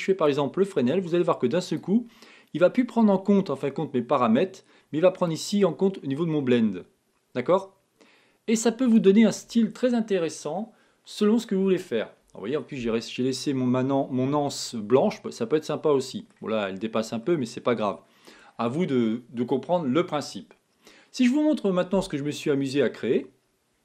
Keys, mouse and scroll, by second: 2.2 click, 5.8-8.3 drag, 13.1-15.3 middle drag, 15.3 scroll up 1, 15.4-18.3 middle drag, 18.5 scroll up 1, 18.8 scroll down 2.